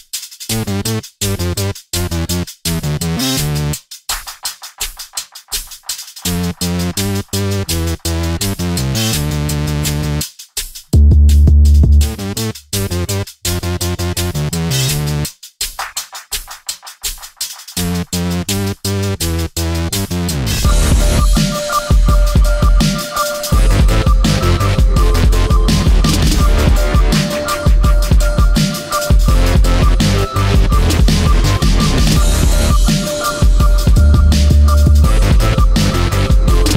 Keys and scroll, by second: 6.2 space, 32.1 space, 34.7 space, 35.9 space.